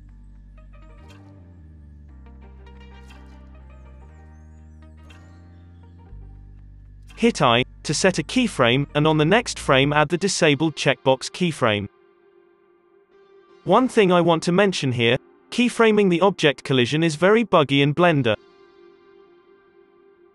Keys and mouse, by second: 0.8 ctrl+z, 1.4-2.7 drag, 3.1-7.9 middle drag, 7.9 i, 9.7 Right, 10.3-11.4 drag, 11.8 i, 13.2 Left, 13.6 space, 14.6 space, 15.9 space, 18.0 middle click.